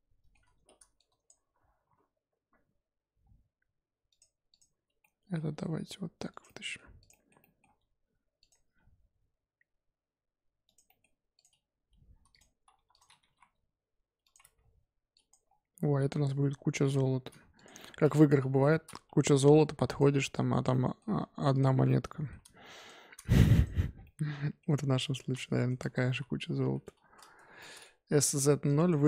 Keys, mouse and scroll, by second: 0.9 click, 1.8 r, 4.5 click, 5.0-5.5 middle drag, 5.5 g, 6.4-7.0 middle drag, 7.0 click, 7.1-7.7 middle drag, 7.7 g, 8.7 g, 10.8-11.3 middle drag, 11.3 click, 11.9-12.3 scroll up 3, 12.3 click, 12.5 Tab, 12.7 1, 12.9 click, 13.2 g, 14.4 Tab, 14.5-15.1 scroll down 3, 15.1 drag, 15.4 scroll down 3, 16.8 shift+click, 17.5 click, 17.7-18.4 middle drag, 18.4 KP_1, 18.5-19.0 scroll up 7, 19.0 Tab, 19.3 2, 19.8 alt+click, 20.7 middle click, 21.5 alt+shift+click, 21.8 middle click, 22.7 alt+shift+click, 23.2 ctrl+z, 23.5 alt+shift+click, 23.9 scroll down 1, 24.0 middle click, 25.0 alt+shift+click, 25.3 middle click, 26.0 s, 27.6 middle click, 28.2 Tab, 28.6 click.